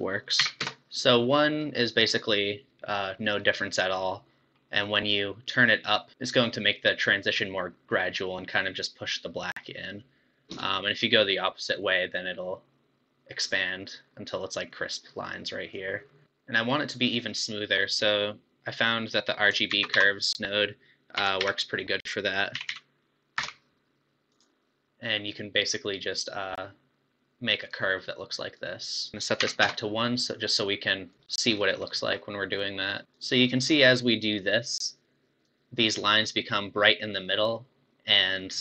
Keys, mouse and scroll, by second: 1.3-4.8 middle drag, 4.8-6.1 drag, 10.5-13.6 shift+drag, 16.3 shift+a, 18.3 scroll up 1, 19.2 click, 19.9 shift+a, 22.7 Down, 26.1-31.1 drag, 31.1 BackSpace, 31.5-31.9 scroll up 5, 31.9 middle click, 32.8-36.1 drag.